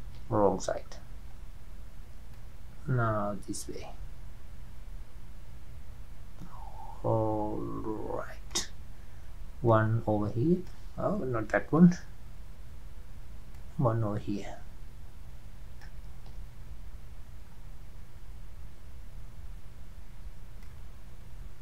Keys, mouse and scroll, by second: 0.6 ctrl+z, 0.8-1.3 scroll up 2, 1.3-2.1 scroll down 3, 2.8-5.5 drag, 10.2-12.2 drag, 12.2 ctrl+z, 14.0-16.7 drag, 16.7 ctrl+z, 17.5-18.8 scroll up 5, 21.1-21.6 drag.